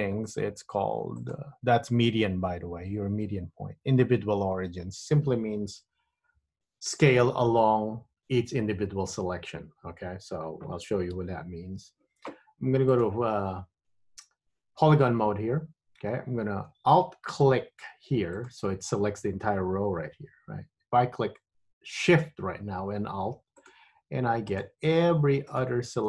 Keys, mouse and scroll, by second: 1.3 click, 1.5 click, 11.3 Tab, 13.0 click, 18.6 alt+click, 23.7 alt+shift+click, 24.7 alt+shift+click, 25.7 alt+shift+click.